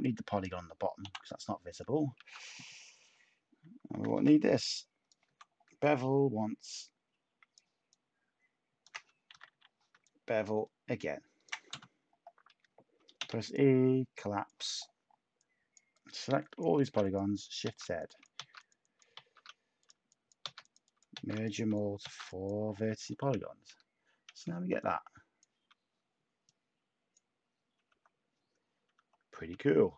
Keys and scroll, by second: 1.0 Delete, 2.1 a, 3.9 b, 9.3 typing, 13.1 e, 16.8-19.1 typing, 20.4-22.3 typing, 23.6 Tab, 25.6 typing, 27.8 Tab, 28.9 Tab.